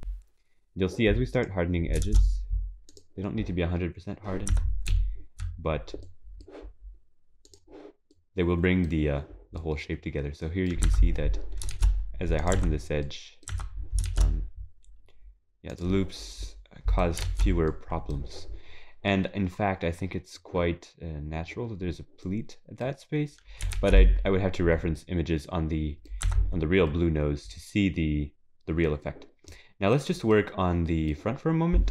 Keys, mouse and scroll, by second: 0.0 click, 0.0 shift+e, 2.0 click, 4.5 Tab, 4.9 z, 6.0 middle click, 9.9 middle click, 10.2 middle click, 10.5 middle click, 10.8 Tab, 11.7 shift+e, 12.5 Tab, 13.0 middle click, 17.3 ctrl+s, 17.7 middle click, 18.7-19.2 scroll down 3, 19.1 middle click, 19.7 scroll down 2, 21.9 scroll down 2, 22.2 middle click, 23.3-23.6 scroll up 1, 23.8 ctrl+s, 24.0 middle click, 25.0 middle click, 26.3 Tab, 26.6 scroll down 4, 26.9 middle click, 29.5 middle click, 30.3 middle click.